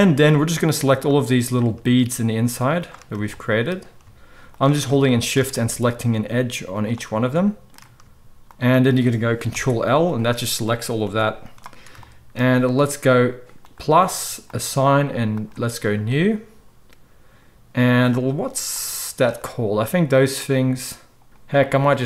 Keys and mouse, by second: 1.0 drag, 1.2-2.8 middle drag, 2.8 shift+click, 2.9-4.4 shift+middle drag, 4.4 shift+click, 4.7-6.7 shift+middle drag, 6.7 shift+click, 6.9-8.5 shift+middle drag, 8.5 shift+drag, 8.6-13.8 middle drag, 9.6 ctrl+l, 11.1 g, 13.8-18.9 drag, 21.3 click, 21.9 middle click.